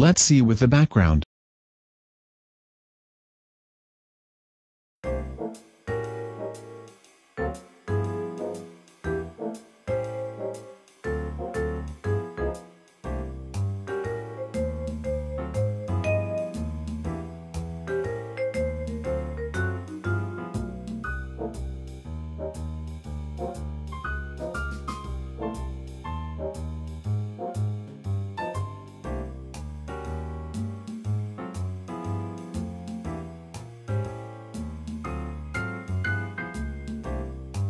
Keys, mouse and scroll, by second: 0.3-1.0 scroll down 1, 2.8 shift+click.